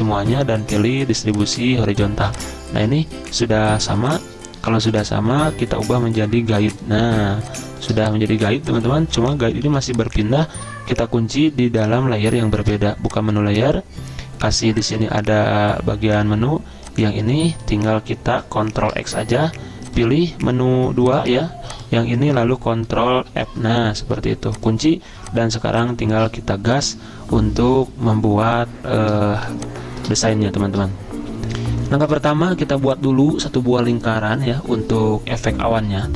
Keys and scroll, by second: 2.2 z, 4.6 v, 7.2 z, 7.9 v, 9.6 ctrl+z, 18.8 ctrl+x, 23.3 ctrl+f, 25.1 z.